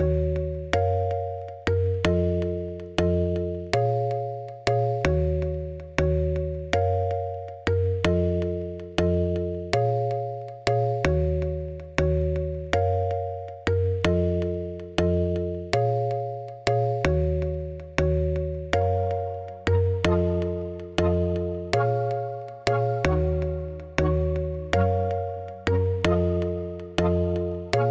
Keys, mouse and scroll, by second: 0.2 Tab, 0.3 s, 1.4 Tab, 1.6 shift+click, 2.1 z, 2.3 click, 2.8 g, 5.5-6.9 shift+middle drag, 6.9 click, 7.9 shift+click, 8.1 shift+s, 8.8 click, 9.0 click, 9.3 shift+s, 9.8 shift+click, 10.0 r, 10.9 middle click, 11.8 ctrl+z, 12.2 middle click, 13.1 Tab, 13.4 click, 13.9-15.1 middle drag, 15.5 shift+s, 15.8 middle click, 16.0 Tab, 16.8 click, 17.1 Tab, 18.4 KP_1, 18.6 KP_3, 19.1 z, 19.7 shift+click, 20.1 shift+click, 20.4-22.7 middle drag, 22.7 p, 22.9 Tab, 23.2 click, 23.4 z, 23.8-24.8 middle drag, 24.8 shift+click, 25.0 r, 25.6 middle click, 26.3 r, 26.7-27.9 middle drag.